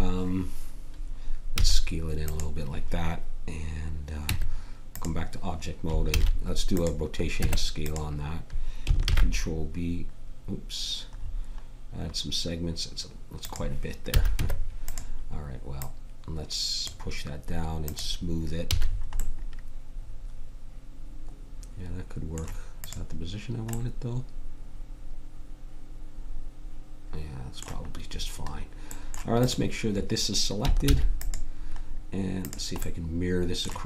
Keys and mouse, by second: 1.5 s, 4.2 Tab, 6.1 ctrl+a, 7.3 Tab, 9.0 ctrl+b, 14.1 a, 14.3 Tab, 15.8-17.7 drag, 18.7 a, 19.2-21.1 middle drag, 22.8-25.9 middle drag, 28.1-29.4 middle drag, 29.4-30.7 drag, 30.8 shift+s.